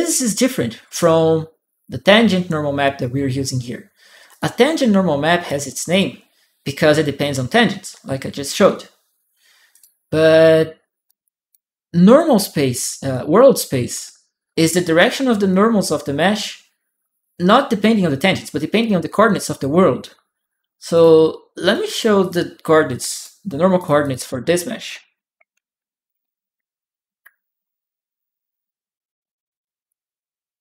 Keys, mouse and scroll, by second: 4.1 click, 9.5 click, 10.8 right click, 10.9 click, 11.9 click, 12.9 click, 20.7 click, 21.5 click, 21.5 right click, 22.0 click, 22.9 click, 22.9 right click, 23.5 click, 23.8 click, 24.0 right click, 25.1-26.5 typing, 27.7 Down, 28.4 Return, 29.6 click.